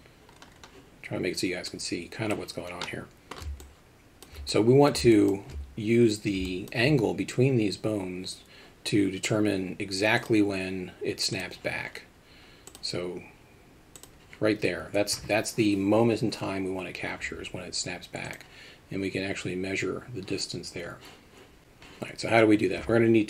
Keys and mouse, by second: 1.7 click, 2.9-3.3 middle drag, 3.6-4.3 alt+shift+middle drag, 4.5-4.9 middle drag, 6.5 alt+middle click, 11.4-12.8 drag.